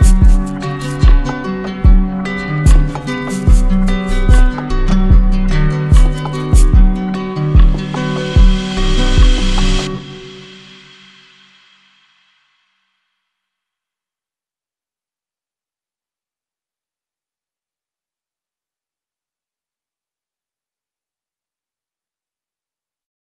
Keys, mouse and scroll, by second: 0.3 click, 0.9 click, 1.3 click, 4.1 click, 5.7 alt+click, 6.5 alt+click, 8.0 click, 15.5 click.